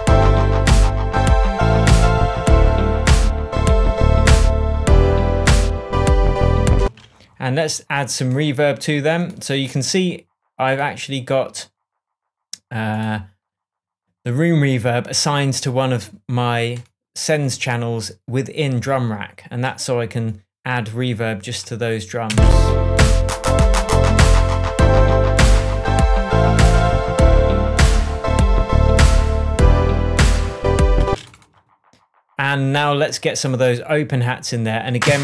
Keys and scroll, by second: 6.8 space, 22.2 space, 31.0 space.